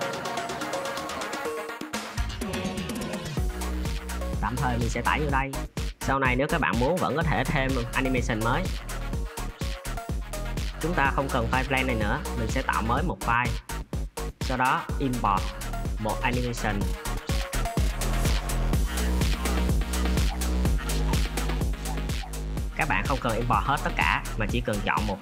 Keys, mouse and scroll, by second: 11.4-13.9 drag, 16.0-19.7 drag.